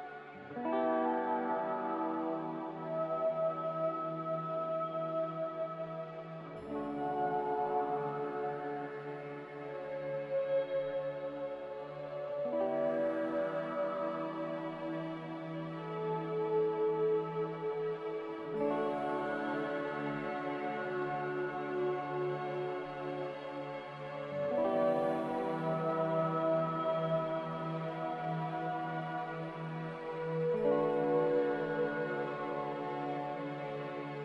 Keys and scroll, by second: 2.9 z, 7.7 a, 8.9 z, 11.3 5, 15.8 g, 17.8 z, 25.2 typing, 27.3-28.4 typing, 29.9 g, 31.4 Escape, 32.3 z.